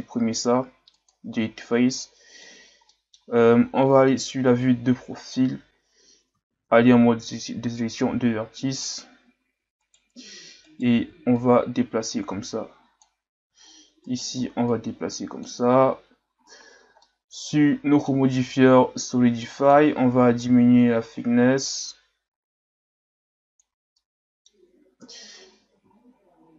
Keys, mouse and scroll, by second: 1.9 scroll down 1, 2.0-3.9 middle drag, 3.9 KP_3, 4.9-5.3 ctrl+scroll down 2, 5.3-5.8 scroll up 4, 6.5 ctrl+Tab, 8.8 alt+right click, 9.8 alt+right click, 10.6 alt+right click, 11.4 click, 14.0 alt+right click, 14.7 click, 16.4-16.7 scroll down 3, 16.7 Tab, 17.1-19.6 middle drag, 19.6-23.4 drag, 23.9-25.0 middle drag, 25.0 KP_3, 26.0-26.4 shift+scroll down 1, 26.4-26.5 scroll up 2.